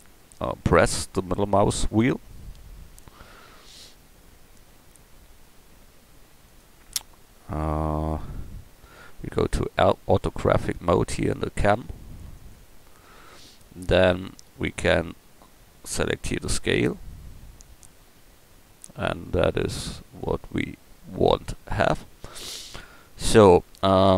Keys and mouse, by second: 2.9 KP_0, 4.9 KP_0, 12.4-15.6 drag, 15.6 middle click, 16.1 click.